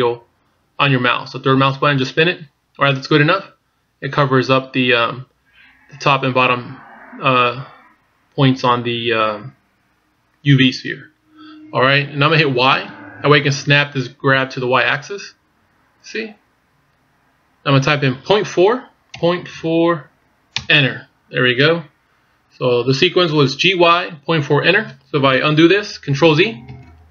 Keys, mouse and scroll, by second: 27.0 ctrl+z.